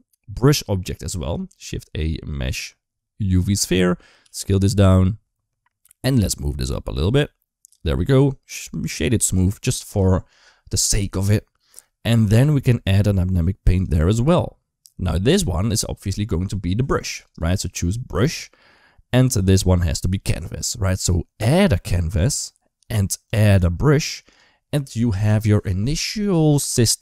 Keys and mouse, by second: 1.2 shift+a, 4.0 s, 5.9 g, 7.0 s, 8.1-9.2 right drag, 13.7 click, 17.1-18.0 drag, 22.0 click.